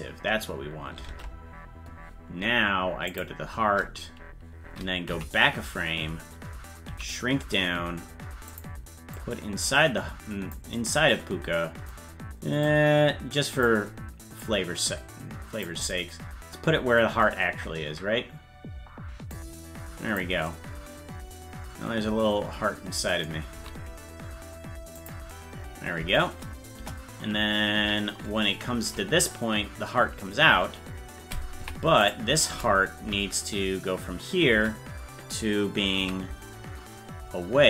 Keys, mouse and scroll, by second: 1.1 ctrl+Tab, 3.1 click, 5.2 Left, 7.0 s, 9.2-10.6 drag, 12.7-13.7 drag, 14.4-15.8 drag, 17.6-19.4 scroll up 1, 19.4 click, 19.4 scroll up 7, 23.6 s, 26.8 KP_0, 28.9 Right, 31.6 Left, 32.1-33.1 right drag, 33.1 Right, 36.0 s.